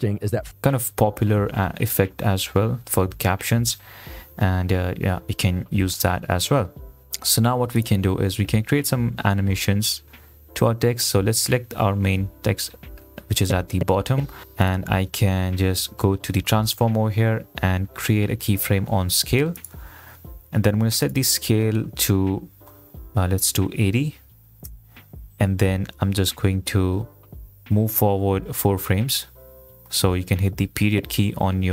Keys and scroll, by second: 25.1 Return, 31.1 ..